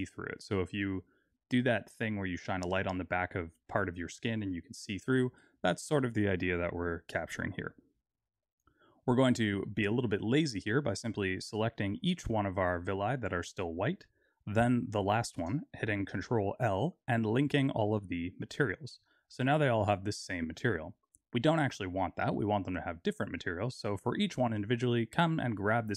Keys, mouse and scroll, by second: 9.4 middle click, 10.1-10.8 scroll down 2, 10.8 click, 12.4 shift+click, 12.9 click, 16.2 ctrl+l, 19.0 click, 20.0-21.7 scroll up 2, 21.7 click.